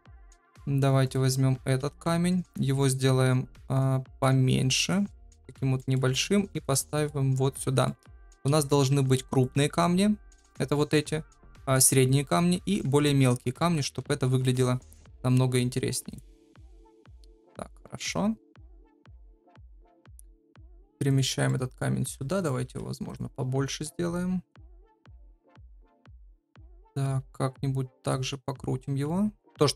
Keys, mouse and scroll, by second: 0.9 7, 1.0 click, 1.7 g, 4.4 s, 5.0 middle click, 6.0 g, 6.8 middle click, 7.8 middle click, 8.3 KP_7, 8.8 g, 13.9 KP_0, 18.7 KP_7, 20.0 g, 21.4 middle click, 22.0 s, 22.6 g, 24.8 KP_0, 26.2 r.